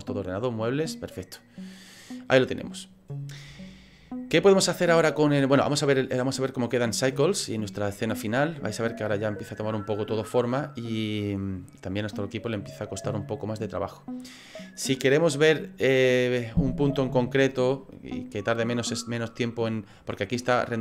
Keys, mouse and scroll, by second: 0.3 click, 3.5 shift+middle click, 6.6 click.